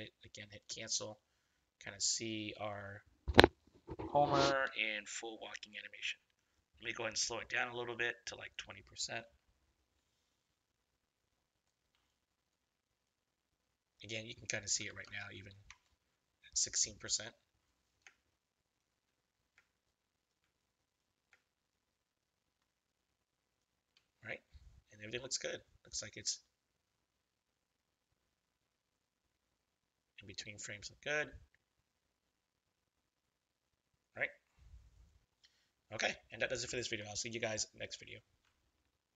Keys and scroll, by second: 15.6 Return, 18.0 space, 19.5 space, 21.2 space, 36.8 ctrl+-.